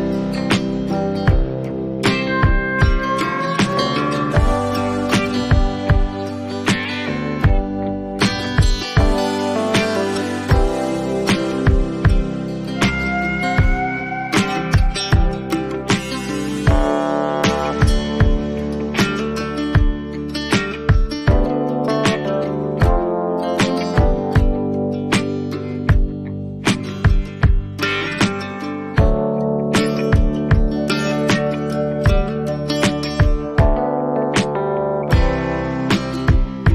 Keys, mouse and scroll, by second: 0.2 click, 4.0 click, 4.5 click, 5.5 click, 7.7 click, 8.1 right click, 11.8 click, 17.5 click, 18.7 ctrl+z, 19.1 right click, 20.1 click, 25.8 click, 27.5 click, 28.6 click, 29.0 ctrl+z, 30.2 click, 33.9 click, 36.0 click.